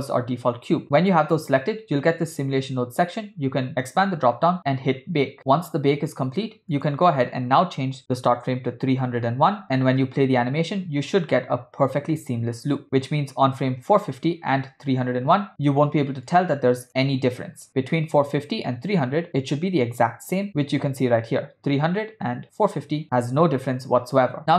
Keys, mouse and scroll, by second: 3.8 click, 6.8-9.6 drag, 9.6 middle click, 10.1 space, 15.5 space, 16.3 click, 19.4 click, 20.5 Right, 22.5 click.